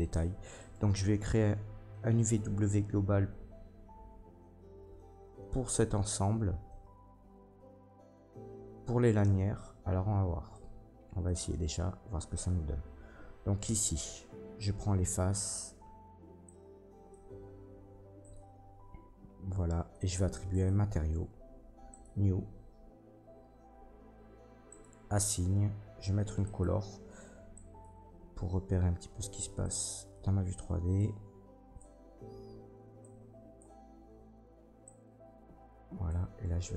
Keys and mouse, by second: 0.5 middle click, 0.5 right click, 13.6 Tab, 14.3 a, 20.6-21.9 middle drag, 21.9-26.6 drag, 26.6-29.6 middle drag, 29.6-36.7 drag.